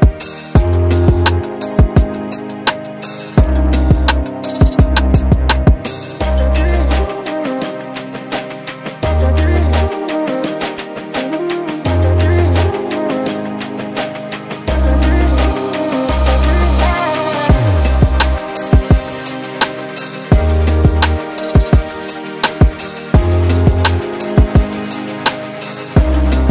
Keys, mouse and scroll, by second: 0.0 alt+middle click, 0.0 scroll down 1, 0.2 middle click, 4.3-11.6 drag, 12.1 alt+click, 12.8-13.2 scroll up 2, 13.2 scroll down 1, 13.4 alt+middle click, 14.5-14.9 scroll down 3, 16.9 click, 21.0 click, 22.1-23.0 typing, 23.1 Return, 24.0 scroll down 2, 24.2 alt+click, 24.9 scroll up 2, 25.5-25.8 scroll down 2, 25.9 scroll up 2, 26.4 scroll down 2.